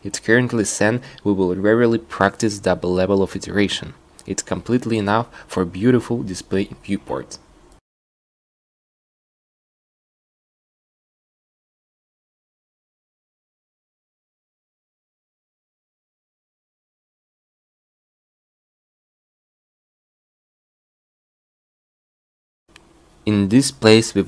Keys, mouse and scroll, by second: 0.0 a, 0.2 c, 1.7 a, 1.8 c, 4.2 q, 4.8 ctrl+r, 5.4 click, 9.0 shift+e, 12.4-15.0 drag, 17.3 right click, 20.4 middle click, 20.8-22.3 right drag, 23.2 shift+e.